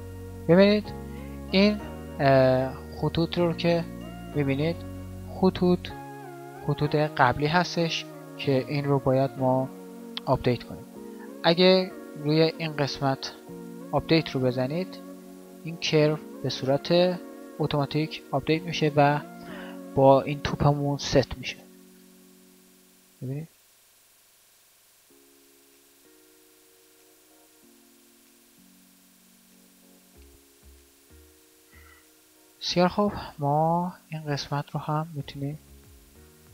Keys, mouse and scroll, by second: 0.4 alt+a, 21.8 alt+a, 31.4 alt+a.